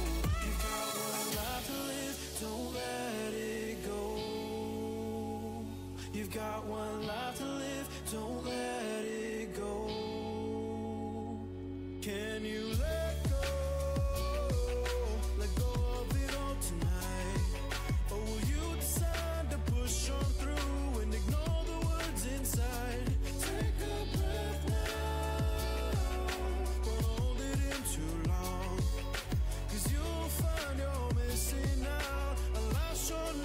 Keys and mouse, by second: 23.3-26.0 middle drag, 26.0-31.1 drag, 31.1 middle click, 31.6-33.4 drag.